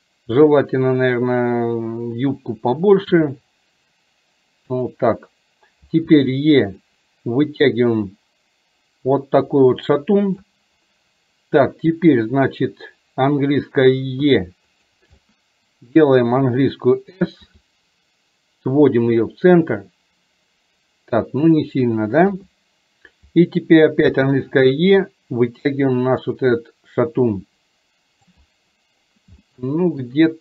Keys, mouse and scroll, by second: 8.0-10.5 drag, 15.4 middle click, 25.8-28.3 drag, 29.4 shift+middle click.